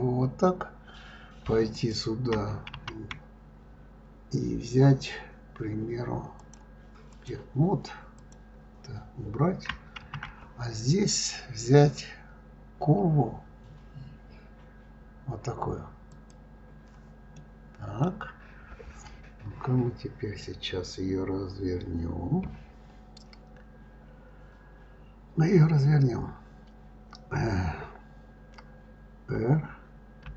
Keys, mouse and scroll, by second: 1.7 click, 2.7 shift+a, 6.4-8.3 drag, 10.0 shift+a, 17.3-20.4 middle drag, 30.2 r.